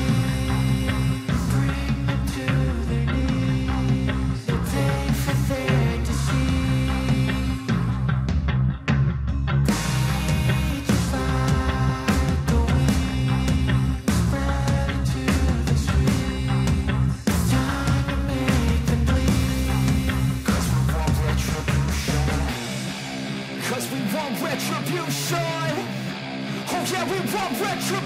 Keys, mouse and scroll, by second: 16.9 click, 23.2 click.